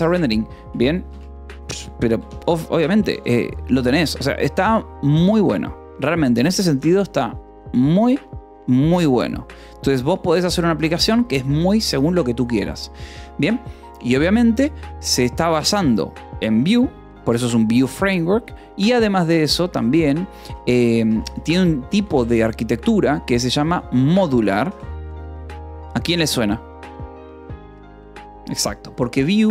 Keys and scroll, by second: 0.3-2.8 typing, 3.7 Escape, 4.9 j, 5.6 j, 11.9 o, 18.1 Escape, 18.3-22.1 typing, 20.2 Escape, 23.1-24.5 typing, 25.2 ctrl+s, 26.0 k, 26.5 j.